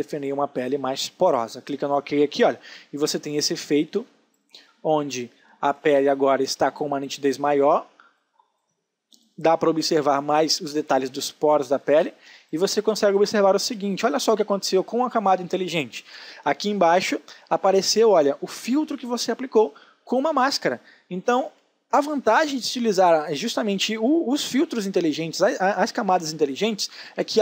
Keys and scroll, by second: 3.7 space, 11.2 ctrl+space.